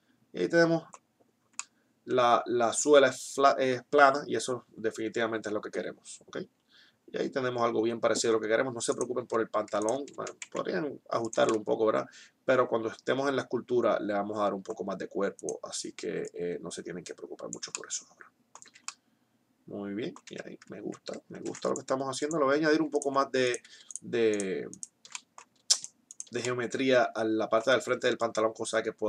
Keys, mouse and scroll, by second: 1.9-3.6 middle drag, 9.1 right click, 9.4 Tab, 10.2 s, 15.2-17.1 right drag, 16.1-17.7 drag, 18.6 Tab, 19.9 Tab, 21.4 ctrl+r, 22.9-25.2 right drag, 28.2-29.0 drag.